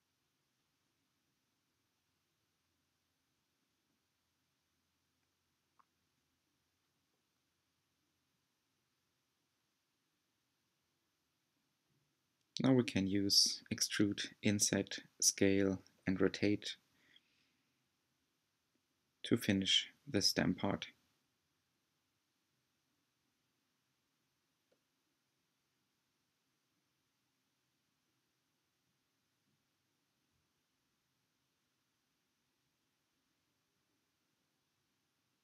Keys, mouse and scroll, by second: 4.4 g, 10.2 i, 14.6 g, 17.6 r, 18.9 e, 24.3-27.7 middle drag, 28.0 z, 28.4 z, 30.0 s, 34.7 click, 34.8 click.